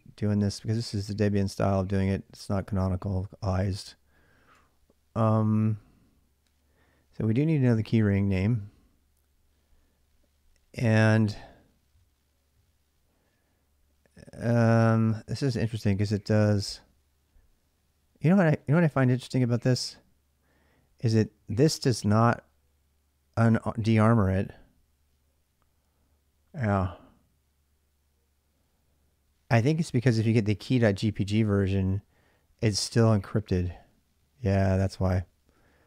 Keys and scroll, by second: 4.3 k.